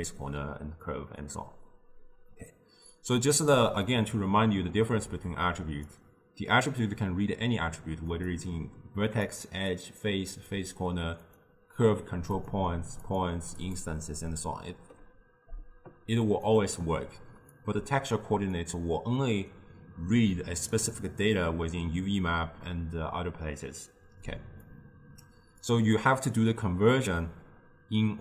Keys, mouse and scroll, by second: 2.6-3.9 drag, 3.9 scroll down 1, 3.9-5.4 middle drag, 5.4 click, 8.2 click, 9.1 click, 9.8 click, 10.4 click, 11.3 click, 13.1 click, 13.7 click, 16.3 click, 17.6 click, 20.8 click, 24.7-27.8 drag.